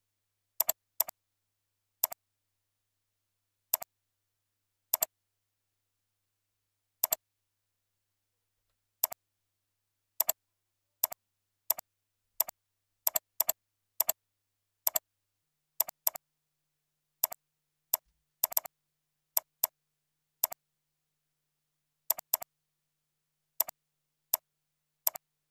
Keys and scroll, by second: 18.3 ctrl+c, 18.7 ctrl+a, 19.0 ctrl+v, 20.0 ctrl+a, 21.9 ctrl+b, 22.8 ctrl+shift+., 23.9 ctrl+shift+..